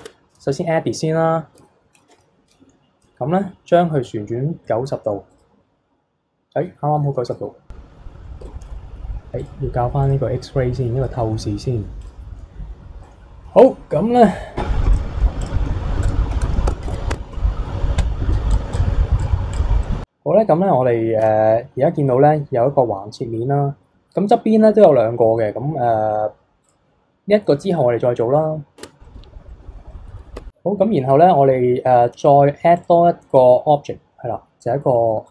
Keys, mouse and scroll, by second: 0.0 Tab, 1.5 KP_3, 2.1 KP_1, 3.0 r, 7.3 click, 8.4 b, 9.4-10.1 drag, 10.6 b, 11.6 x, 13.1-14.9 middle drag, 14.9 alt+click, 15.4 alt+click, 16.0 alt+click, 16.7 f, 16.9 KP_3, 17.1 Tab, 17.3-18.5 middle drag, 18.5 click, 18.7 drag, 19.2-19.6 drag, 19.8-21.2 middle drag, 21.2 KP_3, 25.4-26.7 middle drag, 26.7 click, 27.3 middle click, 27.7 KP_3, 28.8 Tab, 29.0-30.1 middle drag, 30.1 KP_3, 30.3 Tab, 32.7-35.3 drag.